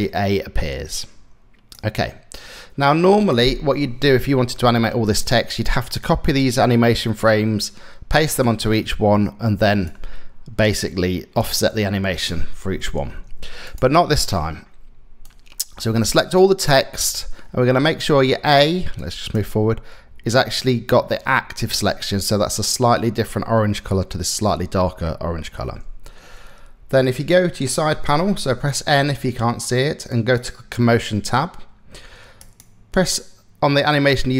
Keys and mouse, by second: 4.2 click, 5.5 click, 8.2-9.5 drag, 10.3 click, 14.9 click, 18.6 click, 28.0 n, 28.5 n, 29.8 click, 32.0 click.